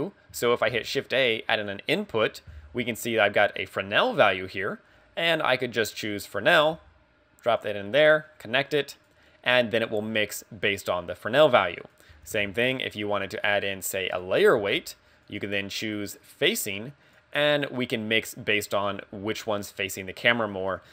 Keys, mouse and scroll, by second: 0.7 shift+a, 7.5 g, 7.6 click, 8.3 click, 11.9 click, 12.4 x, 12.6 shift+a, 14.7 g, 15.5 click, 16.3 click, 20.8 click.